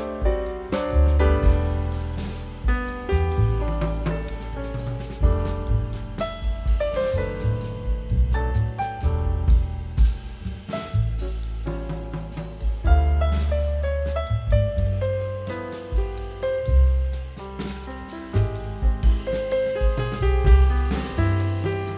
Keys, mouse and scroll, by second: 0.2 scroll up 1, 2.7 scroll down 1, 3.6 scroll up 1, 5.5 scroll down 1, 7.2 scroll up 1, 12.8 ctrl+k, 14.5 scroll down 1, 15.0 scroll up 1, 15.8 double click, 16.2 scroll up 1, 18.7 right click, 20.6 ctrl+click.